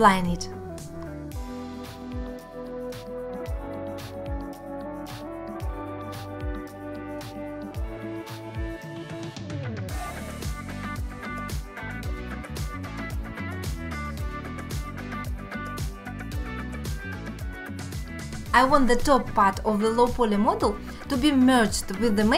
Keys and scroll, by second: 1.2 alt+q, 1.6 alt+q, 2.0 Tab, 2.2 1, 3.1 g, 3.8 alt+q, 5.0 alt+q, 5.6 alt+q, 6.7 j, 7.6 alt+q, 8.4 g, 9.2 alt+q, 10.2 alt+q, 10.6 alt+q, 10.9 alt+q, 11.4 alt+q, 11.8 shift+x, 13.1 alt+q, 13.6 g, 14.4 g, 15.3 alt+q, 15.7 alt+q, 16.1 g, 16.8 alt+q, 17.1 alt+q, 17.5 g, 18.1 alt+q, 18.5 alt+q, 18.7 alt+q, 19.1 g, 19.5 alt+q, 19.9 ctrl+z, 20.3 g, 21.5 alt+q, 21.8 alt+q.